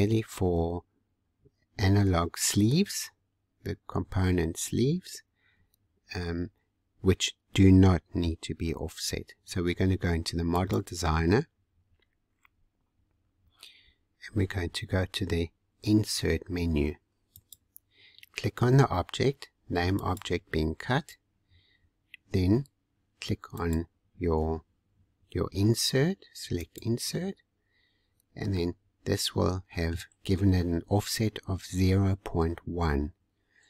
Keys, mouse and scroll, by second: 10.5 click, 11.7 scroll down 2, 14.0-14.7 scroll down 40, 17.3 click, 19.9-23.0 drag, 23.5 click, 26.6-28.5 drag, 28.5-31.5 middle drag.